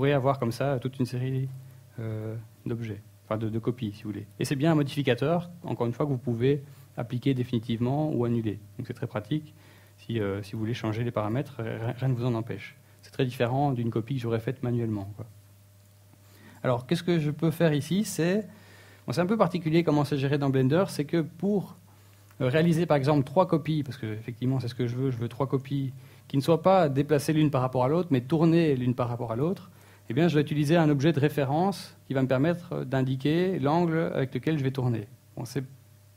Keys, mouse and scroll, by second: 0.8 click, 1.3 click, 1.8 click, 6.8 click, 7.2 click, 7.6 click, 8.0 click, 8.3 click, 9.0 click, 14.5 KP_1, 15.0-16.2 scroll up 3, 20.2 click, 22.3-23.9 scroll down 1, 26.6 click.